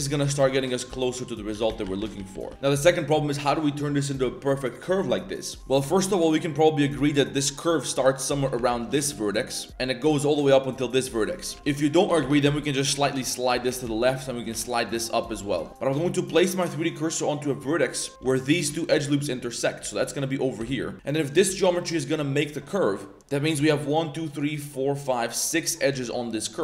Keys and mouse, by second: 0.0-0.4 typing, 1.5 ctrl+z, 1.7 ctrl+z, 1.8 ctrl+z, 2.0 ctrl+z, 2.1 ctrl+z, 2.3 ctrl+z, 2.5 ctrl+z, 2.5 a, 5.6 a, 6.9 Tab, 8.5 Tab, 8.7 1, 8.8 click, 9.1 g, 10.6 click, 11.4 a, 11.5 a, 11.5 ctrl+z, 11.6 b, 12.0 g, 13.5 a, 13.7 a, 13.8 b, 14.4 g, 15.5 a, 15.7 z, 17.4 click, 17.9 click, 18.3 alt+drag, 18.8 alt+shift+click, 19.8 a, 20.1 click, 20.6 shift+s, 20.9 2, 21.3 click, 21.6 shift+drag, 21.8 shift+click, 22.0 shift+click, 22.3 shift+click, 22.6 shift+click, 23.4 click, 23.9 shift+click, 24.1 shift+click, 24.5 shift+click, 25.5 shift+middle click, 25.9 z.